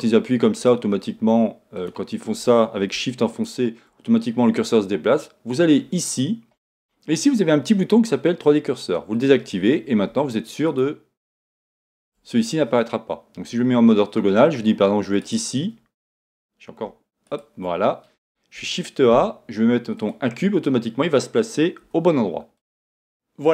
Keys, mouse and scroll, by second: 0.6-1.8 right drag, 1.8 click, 3.3 shift+right click, 6.1-10.7 drag, 10.7 shift+right click, 11.2 shift+right click, 12.0 shift+right click, 13.4 KP_1, 15.2-17.4 right drag, 18.6 shift+a, 21.9 s.